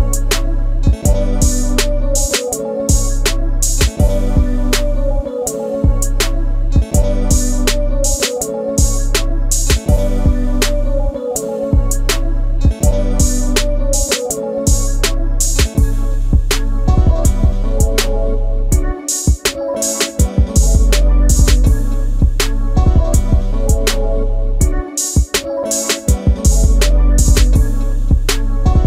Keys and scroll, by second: 5.3 space, 12.1 alt+t, 21.1 ctrl+z, 21.4 space, 27.3 space.